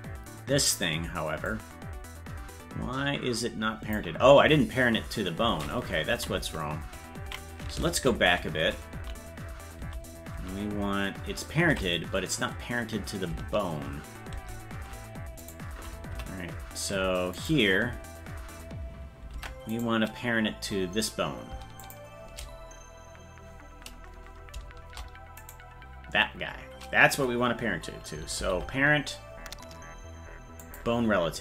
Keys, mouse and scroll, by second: 1.5-4.0 drag, 6.1 Right, 6.5 Right, 8.1 ctrl+z, 14.3 ctrl+Tab, 16.2 Right, 17.4-19.3 right drag, 19.9-21.8 right drag, 21.8 shift+click, 25.5-26.8 right drag, 28.4 ctrl+p.